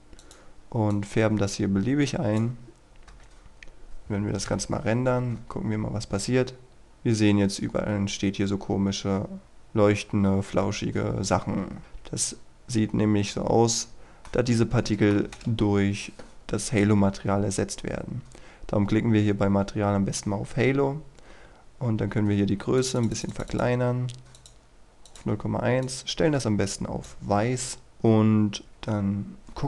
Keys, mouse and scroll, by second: 0.1-2.9 drag, 3.0 KP_0, 3.7-4.4 scroll down 1, 4.4 F12, 5.3 scroll down 1, 11.8 Escape, 13.7 scroll down 1, 13.9-14.2 scroll up 1, 14.2-15.8 middle drag, 16.6-27.8 drag, 28.1-28.7 scroll down 1, 28.8 KP_0.